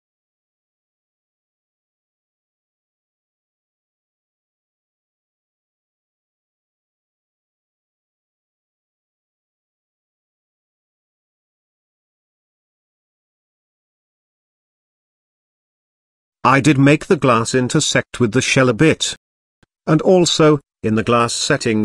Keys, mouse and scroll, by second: 7.5 click, 8.7 click, 10.3 click, 11.8 click, 13.1-13.6 middle drag, 13.7 shift+middle drag, 14.0 middle drag, 14.3 shift+middle drag, 14.7 scroll up 2, 14.9 middle click, 15.3-15.6 shift+middle drag, 16.0 s, 19.2 shift+click, 20.0 z, 20.9-21.8 middle drag.